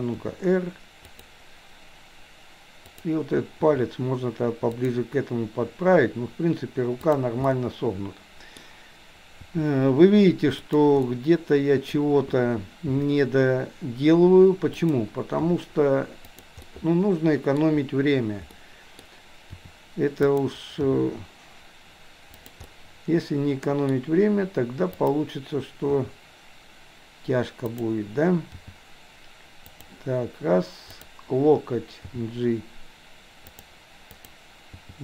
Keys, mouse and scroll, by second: 0.2 r, 2.9 click, 3.6 r, 7.1 click, 7.5-8.7 middle drag, 9.5 r, 11.1 middle click, 13.0 g, 15.5 r, 16.6-17.7 middle drag, 18.5 middle click, 19.6 r, 20.9 g, 22.7-23.9 middle drag, 25.0 click, 25.9 r, 28.6 g, 30.9 click, 32.1 g, 34.1 click, 34.9 g.